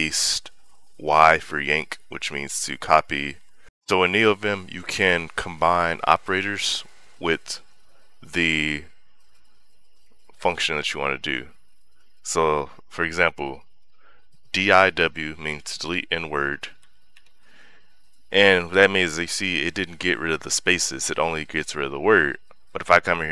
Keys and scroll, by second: 16.6-17.4 typing.